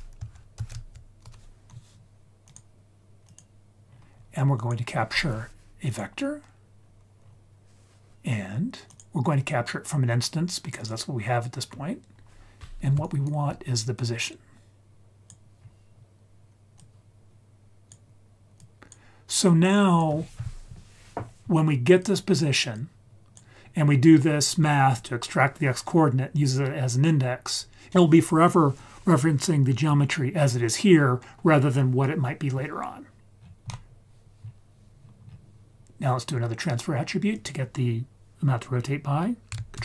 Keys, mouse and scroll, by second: 3.8-4.5 scroll up 3, 4.5-5.9 drag, 6.8-7.2 scroll down 1, 7.2-8.8 scroll up 2, 8.8-10.8 drag, 11.6-11.9 scroll down 2, 12.1-12.9 scroll up 2, 13.0 ctrl+right click, 13.9-15.3 drag, 15.6-16.0 scroll down 1, 16.7-17.9 drag, 18.5 click, 19.4-20.0 drag, 20.5-21.1 scroll down 2, 21.1-22.0 scroll up 1, 22.0 click, 22.0-22.3 scroll up 2, 22.7-23.3 drag, 24.0-24.4 scroll down 2, 27.4-27.9 scroll up 3, 33.2 ctrl+s, 33.3-34.3 scroll down 4, 33.6 middle click, 34.3-35.0 scroll down 2, 35.0-36.6 scroll up 5, 37.3 click, 39.7 ctrl+shift+d.